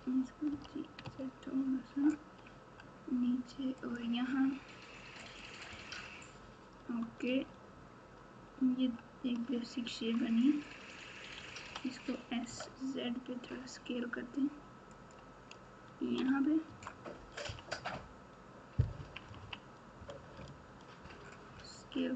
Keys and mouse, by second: 0.5 g, 7.3 Tab, 11.5 s, 16.1 Tab, 16.6 Tab, 17.4 KP_3, 18.9 KP_6, 19.2 KP_6, 21.7 Tab.